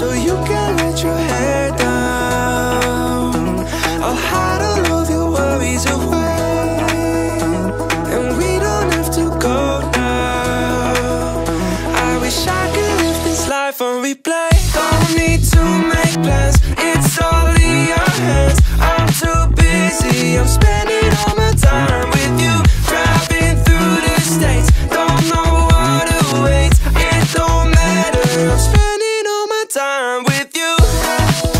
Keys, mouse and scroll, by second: 0.3 click, 1.0 e, 2.6 click, 6.2 e, 12.4 click, 13.7 click, 15.0 click, 15.5-16.4 scroll down 1, 16.4 scroll up 1, 16.9 click, 17.7 click, 18.4-19.1 scroll down 1, 19.1 click, 19.3-20.5 scroll down 1, 21.1 scroll down 1, 21.9 click, 23.0 click, 23.4 click, 26.5 r, 28.5 ctrl+click, 29.0 click, 30.0 r.